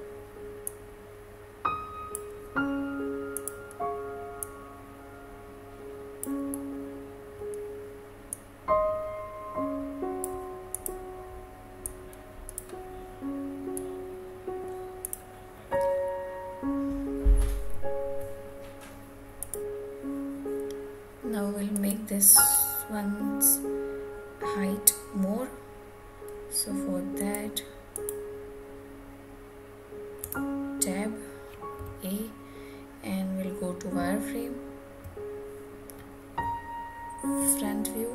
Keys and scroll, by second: 30.1 Tab.